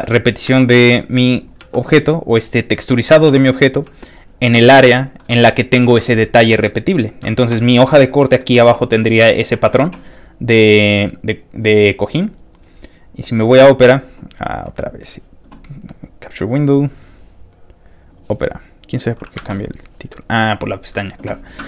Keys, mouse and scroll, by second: 0.3 click, 0.5 g, 1.4 click, 1.6 s, 2.9 click, 3.3 s, 3.8 shift+click, 4.7 shift+middle click, 7.6 middle click, 10.9 click, 11.0 middle click, 11.7 click, 13.3 click, 16.2 alt+click, 16.3 alt+click, 17.0 alt+click, 18.1 alt+click, 18.8 alt+click, 19.4 alt+Tab, 20.6 click.